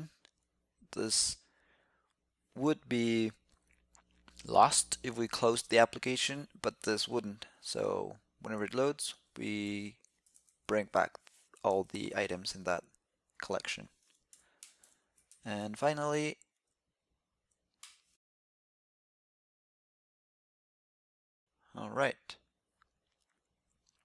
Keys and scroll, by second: 12.9 shift+super+k, 14.5 super+Right, 20.1 super+s, 20.6 super+s.